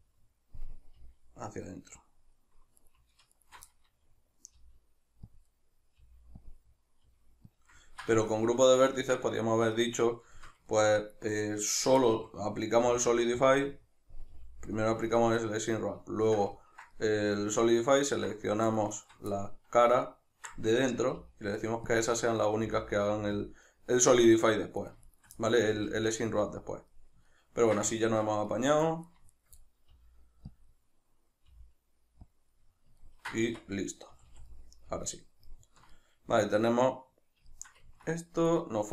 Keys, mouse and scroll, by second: 0.0-2.1 middle drag, 1.0 g, 2.1 click, 2.8 right click, 3.3 alt+shift+right click, 3.7-5.4 middle drag, 4.5 g, 5.4 click, 5.5-6.5 middle drag, 6.0 g, 6.5 click, 6.6-7.6 middle drag, 7.1 g, 7.6 click, 7.8-11.4 ctrl+middle drag, 11.4 right click, 11.7 shift+right click, 12.0-13.5 middle drag, 12.8 g, 13.5 click, 13.6-14.9 middle drag, 14.4 g, 14.9 click, 15.2-18.7 ctrl+middle drag, 18.7 right click, 19.0 shift+right click, 19.4-24.8 middle drag, 21.2 g, 22.0 click, 22.6 g, 23.5 click, 24.8-25.4 shift+right drag, 25.4-26.8 middle drag, 25.8 g, 26.8 click, 27.0-29.1 middle drag, 29.1 right click, 29.4 shift+right click, 29.6-30.6 middle drag, 30.0 g, 30.6 click, 30.7-32.4 middle drag, 31.5 g, 32.4 click, 32.6-33.5 middle drag, 33.5 Tab, 34.1 a, 34.5 middle click, 37.5-38.5 shift+middle drag, 38.5 right click.